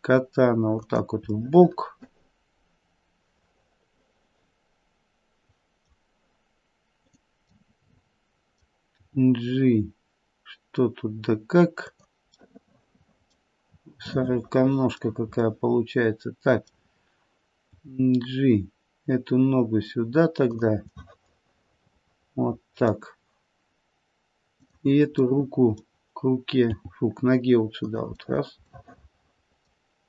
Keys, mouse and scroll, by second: 1.4 middle click, 1.6 middle click, 2.8 middle click, 5.4 middle click, 7.0 click, 7.5 middle click, 8.8 g, 12.4 middle click, 13.2 middle click, 14.1 middle click, 14.8 middle click, 15.4 middle click, 17.7 g, 21.0 middle click, 21.1 middle click, 21.6 middle click, 22.0 middle click, 22.3 middle click, 24.4 click, 25.3 middle click, 26.7 g, 28.7 middle click.